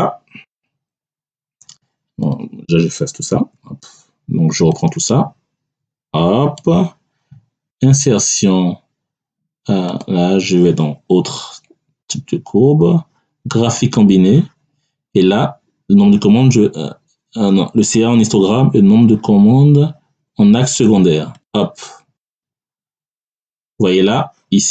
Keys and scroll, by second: 3.3 Delete.